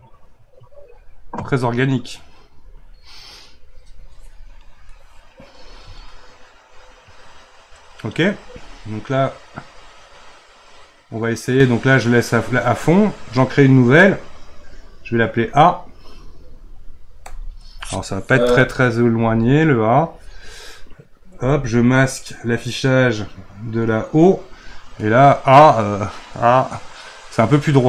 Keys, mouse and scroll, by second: 1.8-4.8 middle drag, 4.9-9.2 shift+middle drag, 9.5 click, 15.5 click, 22.2 click, 25.1-27.7 middle drag, 27.7 click.